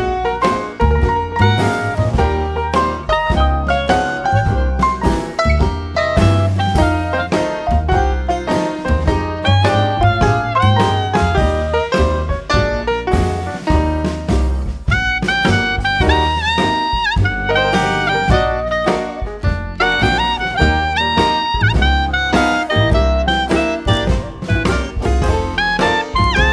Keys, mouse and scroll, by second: 1.2 click, 2.7-4.2 drag, 5.8-9.9 drag, 10.5-12.7 drag, 13.5-14.9 drag, 15.9-18.4 drag, 19.7-23.7 drag, 24.0 click.